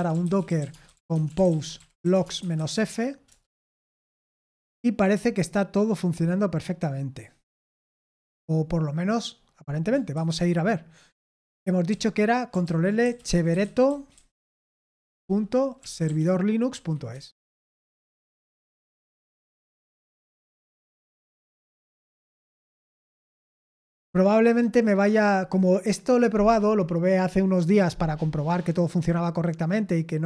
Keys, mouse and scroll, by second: 0.0-3.8 typing, 3.2 Return, 10.1 super+8, 11.8 typing, 12.6 ctrl+l, 12.9-16.5 typing, 16.7 Down, 17.1 Return.